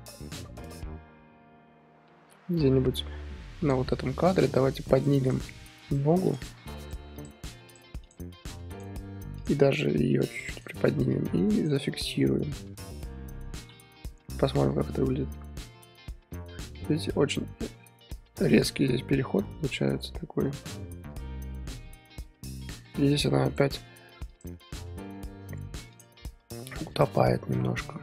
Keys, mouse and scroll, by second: 4.4 click, 5.2 click, 5.4 r, 6.4 click, 6.5 r, 7.2 click, 7.4 r, 8.1 click, 8.3 r, 9.4 click, 9.8 g, 11.6 shift+click, 13.2 i, 14.3-23.9 drag, 24.5 click, 26.0 click, 26.2 r, 27.6-28.0 middle drag.